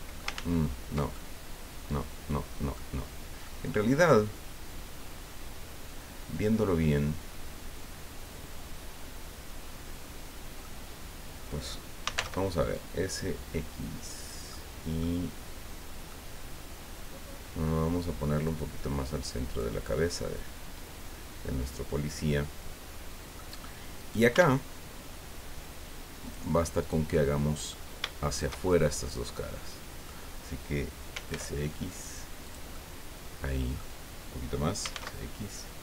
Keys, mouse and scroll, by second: 0.3 ctrl+z, 1.1-2.9 ctrl+drag, 3.1 scroll down 2, 3.4-10.8 drag, 12.0 s, 12.1 x, 14.2 click, 14.5 middle click, 16.1-17.8 middle drag, 18.4-19.8 drag, 19.8-23.5 middle drag, 24.0 right click, 24.3 Tab, 26.2 click, 26.8 right click, 27.1 middle click, 28.3 shift+right click, 28.6-30.2 shift+middle drag, 30.6 scroll down 2, 31.1 s, 31.3 x, 32.4-33.9 drag, 34.8 s, 34.9 x.